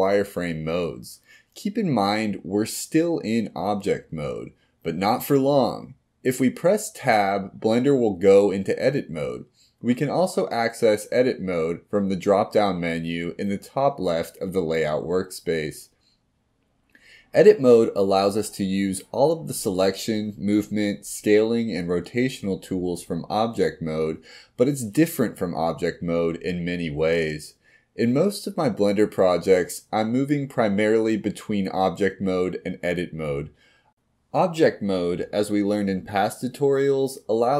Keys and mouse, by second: 0.0 click, 0.9 click, 1.5 click, 2.2-6.8 middle drag, 9.1 Tab, 12.5 Tab, 13.8-14.9 drag, 19.0-20.3 middle drag, 20.3 middle click, 22.0 click, 24.4 click, 26.5 click, 27.0-27.7 middle drag, 28.7-29.5 middle drag, 30.2 click, 30.6 middle click, 31.7 click, 32.0 middle click, 33.9 click.